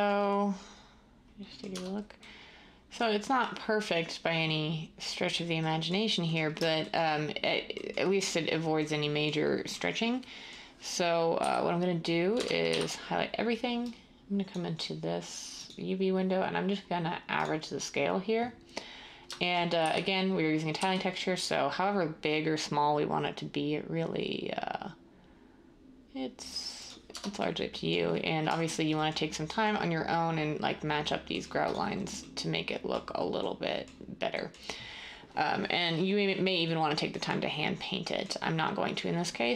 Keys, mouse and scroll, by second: 1.7 Tab, 11.3-12.7 typing, 19.7-20.7 typing, 27.1 Tab.